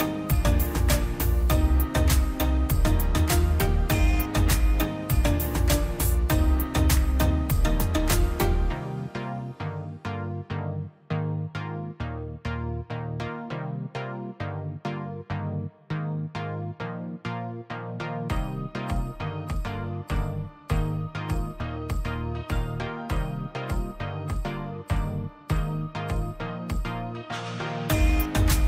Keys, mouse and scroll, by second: 0.2 middle click, 0.5 scroll up 1, 1.5 middle click, 2.3 click, 2.4-2.7 scroll down 1, 3.5 middle click, 3.7 scroll down 1, 5.9 click, 6.5 scroll down 1, 6.8 click, 6.9-7.3 scroll, 7.5 click, 7.8 middle click, 8.7 click, 8.8 scroll down 1, 9.2 middle click, 9.4 scroll down 1, 9.6 middle click, 9.9 scroll up 1, 10.4 click, 11.1 scroll, 11.4 click, 11.5 scroll down 1, 12.3 middle click, 12.9-13.3 scroll up 1, 13.3 click, 13.5-14.1 scroll up 1, 14.2 click, 15.8-16.4 scroll up 1, 16.4 click, 17.3 scroll down 1, 18.4 middle click, 18.8 scroll up 1, 19.8 middle click, 20.0-20.3 scroll down 1, 20.8 click, 20.9 click, 22.7 click, 28.4 space.